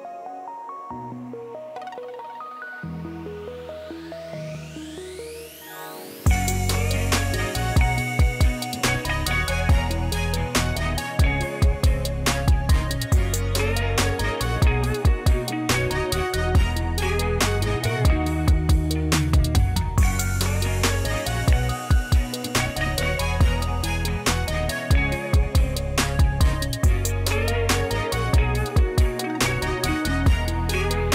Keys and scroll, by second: 18.4-19.5 typing, 20.7 typing, 20.8 Return.